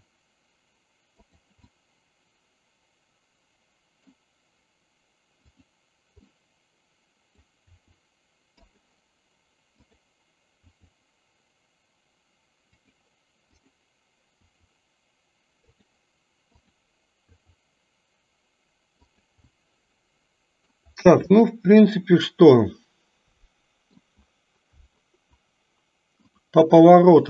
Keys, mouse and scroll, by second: 1.9-4.1 middle drag, 6.2-7.5 middle drag, 7.8 r, 10.6 r, 13.6 click, 14.5 r, 16.5-16.9 drag, 17.4 r, 19.6-20.9 middle drag, 22.1-23.9 middle drag.